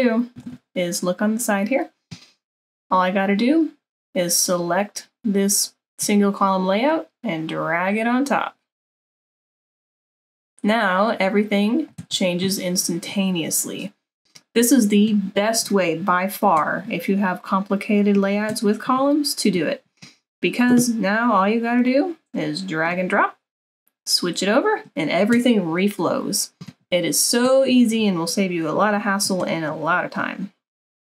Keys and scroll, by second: 12.2 super+-.